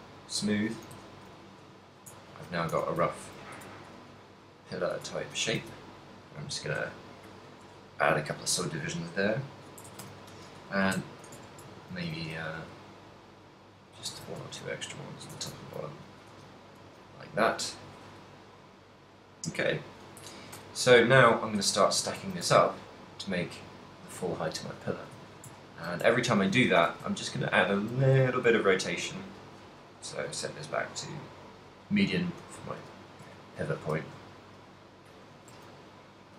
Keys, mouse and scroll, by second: 0.9 click, 1.1 a, 1.3 middle click, 1.9 shift+middle click, 2.2 Tab, 2.4 a, 3.1 a, 3.5 ctrl+n, 3.7 Tab, 3.7 middle click, 4.7 a, 5.0 Tab, 5.3 a, 5.6 ctrl+r, 7.6 click, 9.1 middle click, 9.5 middle click, 9.9 Tab, 10.1 a, 10.9 KP_1, 11.4 Tab, 12.4 ctrl+r, 14.3 click, 14.3 a, 14.4 ctrl+r, 15.4 Tab, 15.4 click, 15.6 ctrl+middle click, 15.9 middle click, 16.4 a, 16.6 middle click, 16.9 a, 17.2 middle click, 17.7 middle click, 18.6 middle click, 20.6 KP_1, 21.7 right click, 22.3 shift+d, 25.1 click, 25.4 shift+middle click, 26.1 ctrl+middle click, 26.8 r, 27.9 click, 28.0 r, 29.5 right click, 30.5 click, 33.4 g, 33.5 shift+click, 33.9 e, 35.3 shift+click, 35.9 middle click, 35.9 a.